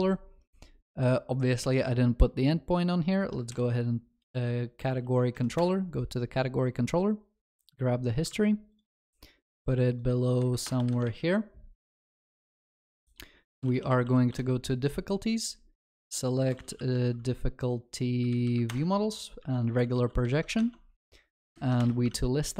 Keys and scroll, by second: 3.6 ctrl+shift+n, 8.3 ctrl+c, 14.3 Return, 18.8 Return, 20.3 ctrl+alt+shift+l, 21.8 ctrl+s, 21.8 ctrl+y.